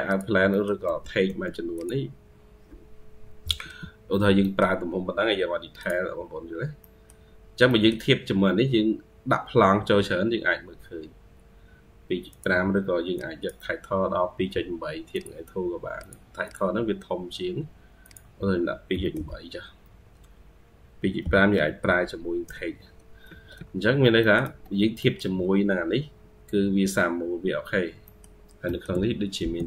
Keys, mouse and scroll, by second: 0.4 middle click, 0.7 typing, 3.9 scroll, 3.9 F8, 3.9 scroll up 1, 4.0 scroll down 2, 4.3 middle click, 4.9 scroll up 2, 6.7 middle click, 7.2-7.5 scroll down 1, 7.5 middle click, 16.3 double click, 23.1 Escape, 23.4 Escape, 23.9 scroll down 1, 24.0 middle click, 24.3 Escape, 24.8 middle click, 25.7-26.5 scroll up 3, 26.9-27.9 scroll down 1, 27.9 middle click, 28.5 middle click, 29.4 scroll up 1.